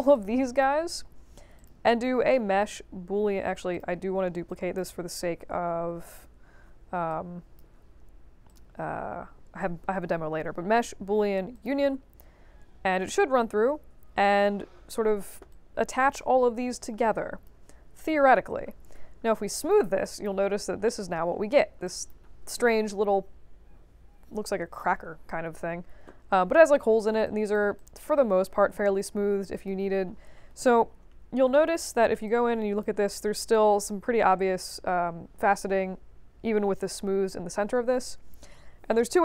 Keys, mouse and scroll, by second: 0.1-0.6 drag, 1.5 click, 3.7 click, 4.4 click, 5.2 ctrl+d, 5.7 ctrl+h, 7.0 click, 8.4 click, 11.5 click, 13.4 middle click, 14.0 middle click, 15.5 alt+click, 17.0 alt+click, 18.9 3, 19.5 click, 20.0 alt+click, 20.8 alt+middle click, 21.8 alt+click, 26.3 scroll up 2, 26.6 middle click, 27.2 alt+click, 27.7 click, 29.5 click, 30.1 middle click, 30.5 click, 30.9 middle click, 31.5 alt+middle click, 32.2 click, 37.9 1.